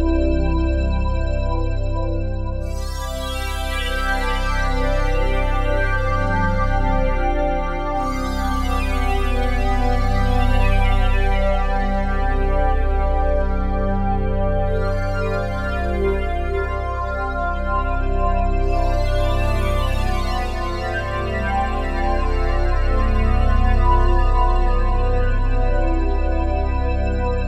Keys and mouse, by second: 0.2 click, 2.8 click, 4.0 click, 5.4 click, 8.8 click, 9.3-10.5 drag, 10.8-13.4 drag, 14.8 g, 15.1 x, 18.0 click, 18.8 alt+shift+click, 19.3-20.6 ctrl+alt+drag, 21.4 g, 21.8 x, 27.2 shift+click.